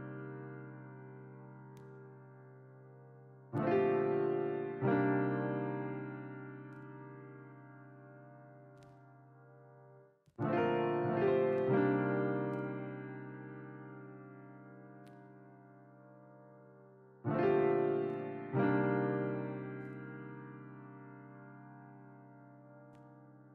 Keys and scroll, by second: 1.2 ctrl+z, 1.4 ctrl+z, 5.6 ctrl+z, 6.0 ctrl+z, 8.4 Delete, 11.5 ctrl+z, 11.7 ctrl+z, 11.8 ctrl+z.